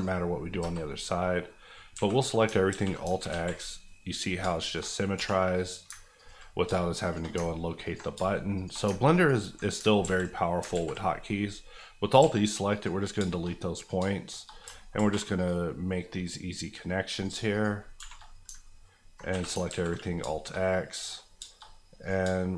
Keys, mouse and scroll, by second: 0.6 KP_Enter, 1.1 middle click, 1.9 a, 2.7 alt+x, 3.3 alt+z, 3.8 middle click, 4.4 shift+middle click, 4.8 scroll up 1, 5.1 1, 5.5 click, 5.9 ctrl+click, 6.5 click, 6.6 shift+click, 7.3 click, 7.4 ctrl+click, 8.1 click, 8.1 shift+click, 8.8 click, 9.0 ctrl+click, 9.6 click, 9.8 ctrl+click, 10.1 ctrl+x, 10.7 ctrl+x, 10.9 z, 12.2 x, 12.7 click, 13.1 shift+click, 13.2 shift+middle click, 13.8 click, 13.9 shift+click, 14.5 click, 14.6 alt+click, 14.9 alt+m, 15.3 click, 15.8 middle click, 17.1 click, 17.3 shift+click, 18.0 shift+r, 19.2 r, 19.5 alt+a, 19.7 alt+x, 20.0 scroll down 2, 20.3 shift+middle click, 20.5 middle click, 21.3 shift+middle click, 21.7 middle click, 22.0 click, 22.2 shift+click.